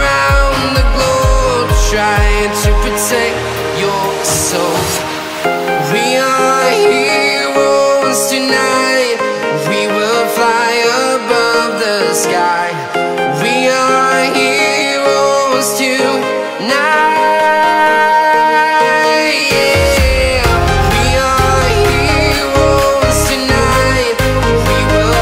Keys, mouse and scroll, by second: 1.1-1.4 scroll down 1, 1.4-3.1 right drag, 3.1 scroll down 1, 3.5 click, 3.7 scroll down 1, 5.0 right click, 5.9-7.2 shift+drag, 7.2 right click, 7.7 scroll up 1, 8.0 right click, 8.9 scroll down 1, 9.3 right click, 9.8-10.7 scroll up 1, 10.7 click, 13.3 right click, 14.5 ctrl+z, 16.1-17.0 typing, 17.1 right click, 18.1-18.8 scroll down 1, 19.3 scroll up 1, 19.4 click, 19.8 shift+click, 20.0 right click, 20.7 shift+click, 21.4-21.8 scroll down 1, 21.8 click, 22.4 scroll down 1, 22.6 right click, 23.6-23.9 scroll down 1, 24.3-24.7 scroll, 24.3 click, 24.7 scroll up 1, 24.8 right click.